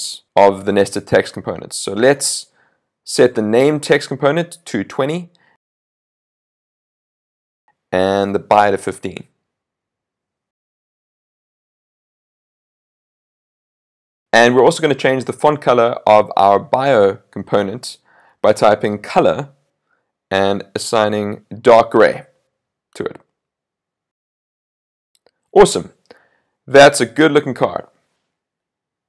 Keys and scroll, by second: 5.2 super+s, 14.1 super+s, 23.2 super+s.